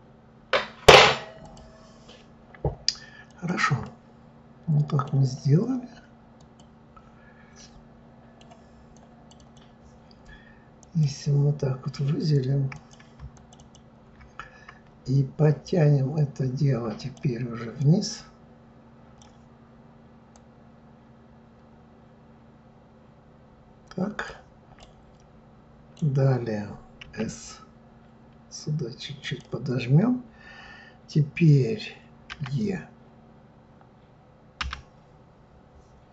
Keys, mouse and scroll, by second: 1.4 click, 3.3 click, 3.8-6.3 middle drag, 6.3 click, 7.6-8.9 middle drag, 8.9 click, 9.3 click, 10.8 click, 12.7 click, 13.3 shift+click, 13.6 shift+click, 17.0 click, 17.8-20.6 drag, 24.8-26.0 middle drag, 32.3 e.